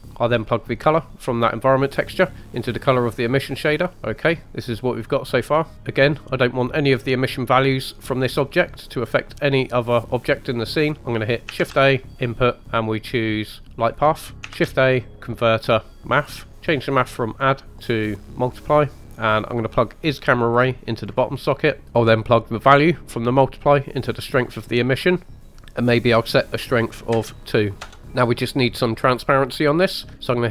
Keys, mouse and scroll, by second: 0.8 click, 4.1 middle click, 9.7 click, 11.5 shift+a, 14.1-14.8 typing, 14.3 click, 16.5 click, 17.3-18.5 drag, 19.0-19.7 scroll up 1, 20.0 drag, 21.8 ctrl+z, 22.8 drag, 25.0 click, 25.4-27.8 drag.